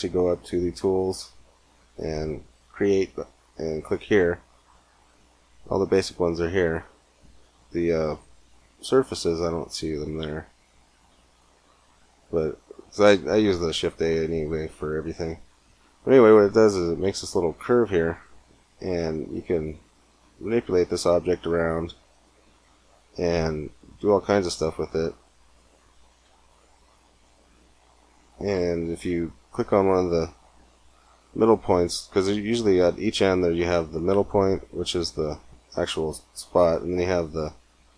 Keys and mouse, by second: 1.6-3.6 drag, 8.3 middle click, 13.3 shift+a, 17.3 Tab, 20.0 r, 24.0 click, 24.7 middle click, 25.9 r, 29.4-31.3 middle drag, 35.0 g, 37.0-37.9 drag, 37.7 r.